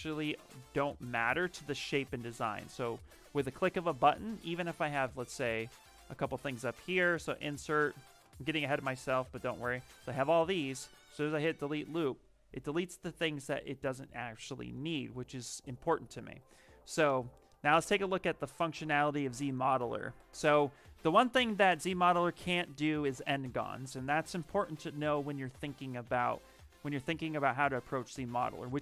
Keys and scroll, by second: 2.4 ctrl+z, 6.0 space, 14.0 ctrl+z, 14.2 ctrl+z.